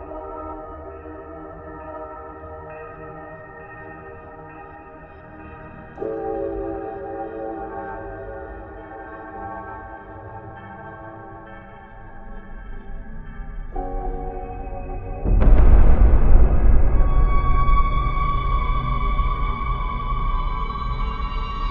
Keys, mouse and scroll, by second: 0.0-1.5 typing, 0.0 Tab, 0.3 click, 0.8 ctrl+Tab, 1.0 ctrl+Tab, 1.8 Tab, 1.9 ctrl+alt+shift+c, 2.9 z, 3.2 z, 3.9 KP_3, 3.9 z, 3.9 Tab, 4.4 right click, 4.6 right click, 5.2 right click, 6.1 KP_7, 6.6 Tab, 6.9 Tab, 8.2 shift+Tab, 9.0 z, 9.2 ctrl+a, 9.3 ctrl+a, 10.6 Tab, 10.7 s, 10.7 Tab, 11.4 KP_Decimal, 11.5 ctrl+z, 11.8 click, 12.0 click, 12.7 Tab, 12.7 KP_3, 13.4 Tab, 13.9 KP_3, 14.3 KP_3, 15.2 Tab, 15.3 z, 15.6 ctrl+alt+shift+c, 15.7 s, 16.5 Tab, 16.6 alt+space, 16.7 s, 17.1 Tab, 18.3-21.7 typing, 18.3 Tab, 18.7 right click, 18.9 right click, 19.0 ctrl+Tab, 19.0 middle click, 19.2 alt+space, 19.4 alt+space, 19.8 Tab, 20.2 Tab, 20.8 alt+space, 20.9 Tab, 21.1 ctrl+j.